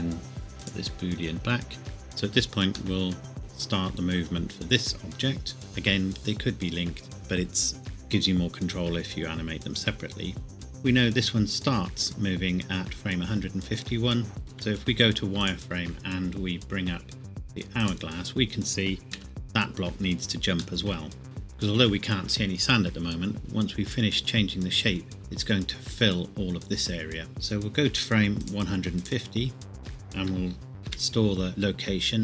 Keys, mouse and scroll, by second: 2.6-3.0 scroll down 1, 3.0 middle click, 10.5 click, 12.6 scroll up 1, 14.4 Escape, 14.7 z, 15.4 click, 16.2 click, 17.8 click, 19.2 KP_1, 20.8 shift+middle click, 21.2-23.1 scroll up 1, 28.4 click, 28.8 click, 30.9 i.